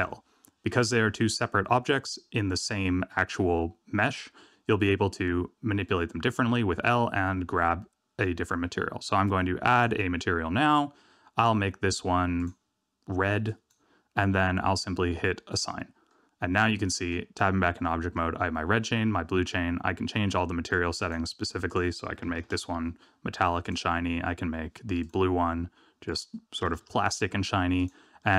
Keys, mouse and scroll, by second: 0.3 middle click, 9.6 click, 11.3 click, 12.3 click, 15.5 click, 17.2 Tab, 17.8 middle click, 20.6 click, 21.6 click, 23.6 click, 25.0 click, 26.0 click, 27.7 click, 28.1 middle click.